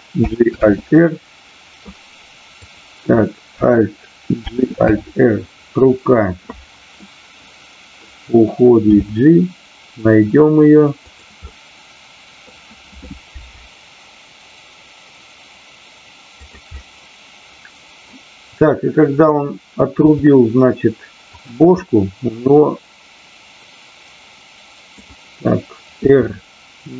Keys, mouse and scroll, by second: 0.8 alt+r, 4.8 alt+r, 6.9-8.0 middle drag, 11.0 click, 11.4-12.4 middle drag, 16.3 click, 16.8-18.1 middle drag, 21.4 click, 21.8 scroll up 1, 21.9-24.9 middle drag, 26.1 r.